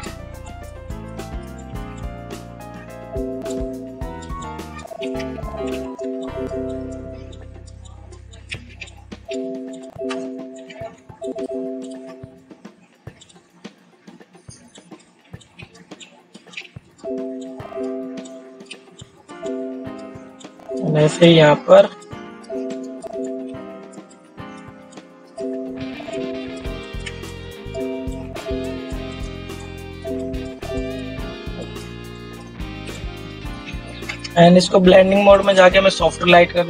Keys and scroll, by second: 34.3 ctrl+0.